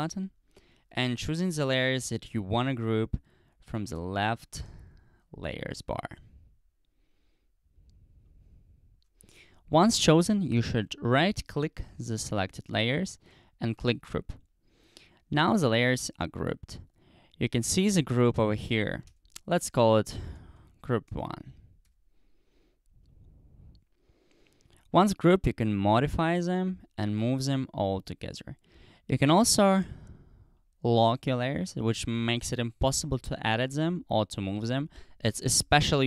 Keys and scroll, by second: 19.1-21.9 typing.